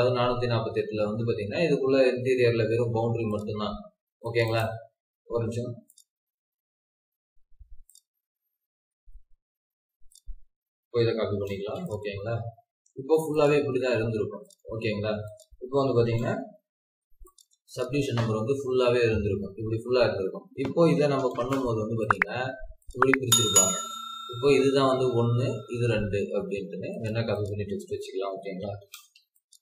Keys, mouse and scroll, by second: 4.4 right click, 8.3-8.8 scroll down 1, 8.8-10.9 scroll up 1, 10.9-11.3 typing, 12.1 scroll down 1, 12.9 scroll up 1, 13.4-14.1 typing, 16.0 typing, 17.6 double click, 18.2 Escape, 20.9 typing, 23.5 Escape, 26.3-26.9 scroll up 1, 27.3 double click, 28.2-29.2 typing, 29.5 scroll down 1.